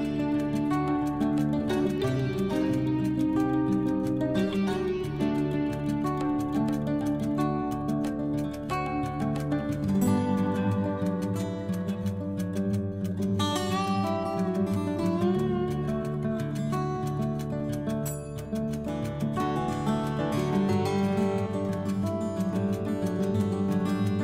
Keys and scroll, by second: 1.5 ctrl+z, 3.8 1, 4.0 4, 4.7 Return, 6.6 Return, 12.9 ctrl+g, 16.2 Delete, 16.8 p.